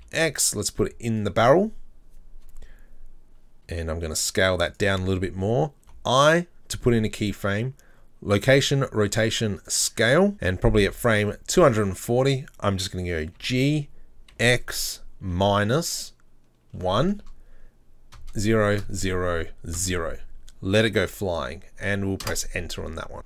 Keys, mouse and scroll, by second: 3.7 s, 10.9 click, 11.5-13.4 scroll down 4, 13.4 g.